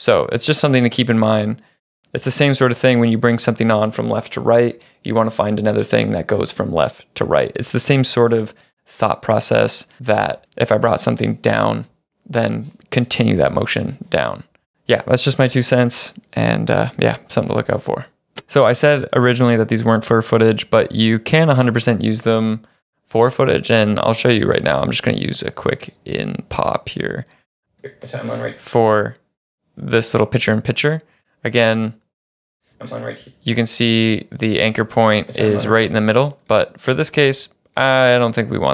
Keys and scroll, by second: 27.8 space, 32.6 space.